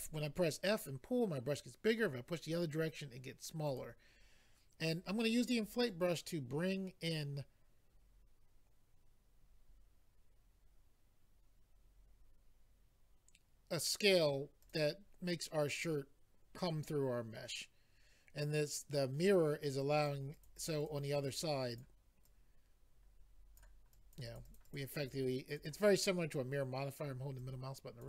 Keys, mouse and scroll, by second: 3.6 click, 3.7 click, 5.8 click, 14.6 click, 14.7 click, 20.0 click, 20.1 click, 20.3 click, 20.4 click, 20.5 click, 20.7 double click, 20.8 click, 20.9 click, 21.3 click, 21.4 double click, 21.7 double click, 21.8 double click, 22.2 double click, 23.9 click, 24.2 click, 24.4 click, 24.4 click, 24.6 double click, 24.6 click, 24.8 click, 25.0 click, 25.1 double click, 25.5 click, 25.6 click, 26.0 middle click, 27.4 click.